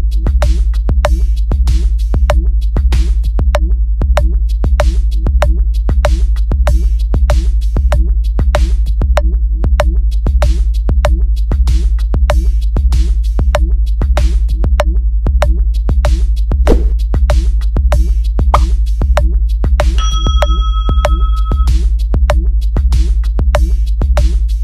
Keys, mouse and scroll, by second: 1.5 click, 2.0 click, 4.0 click, 4.8 click, 4.9 click, 5.6 click, 6.8 click, 7.0 click, 7.3 click, 7.5 click, 7.7 click, 7.9 click, 8.0 click, 8.2 click, 8.4 click, 8.6 click, 8.8 click, 9.0 click, 9.1 click, 9.3 click, 10.8 click, 11.0 click, 11.2 click, 17.2 click, 18.5 click, 18.9 click, 19.7 click, 20.2 scroll up 1, 22.6 click, 24.4 click, 24.5 click.